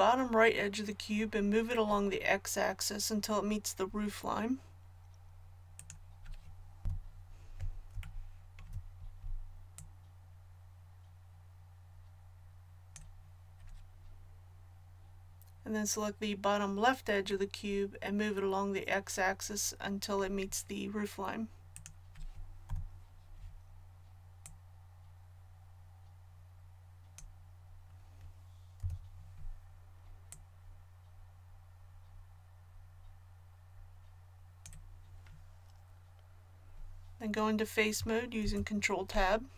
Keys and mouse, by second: 3.9-6.8 drag, 6.8 KP_1, 25.9 click, 28.8 l, 38.4 ctrl+Tab.